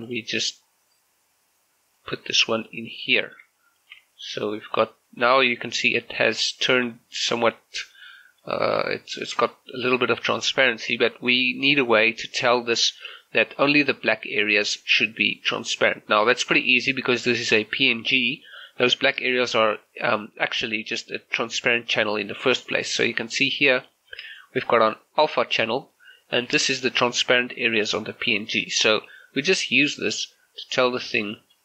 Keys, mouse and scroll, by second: 0.1 click, 3.2 shift+middle click, 3.8 click, 4.0 g, 4.4 click, 5.4 middle click, 7.0 middle click, 9.6-10.9 middle drag, 23.6 scroll up 1, 24.0 shift+middle click, 25.4-31.6 drag.